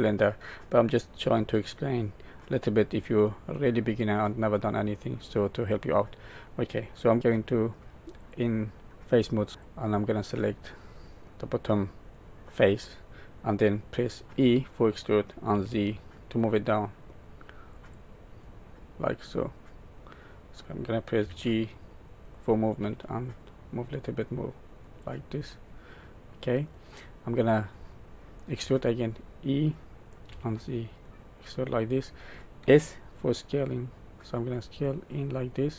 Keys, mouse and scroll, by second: 3.5 middle click, 8.2 click, 9.6 click, 12.1 middle click, 14.3 e, 18.4 middle click, 21.2 g, 25.4 middle click, 28.5 e, 32.6 s.